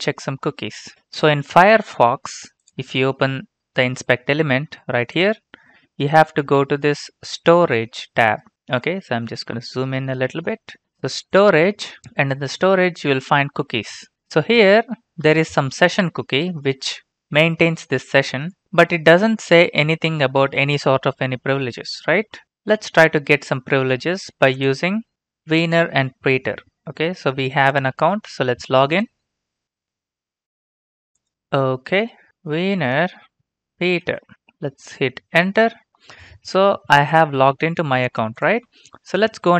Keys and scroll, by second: 32.1-34.6 typing, 35.4 Return.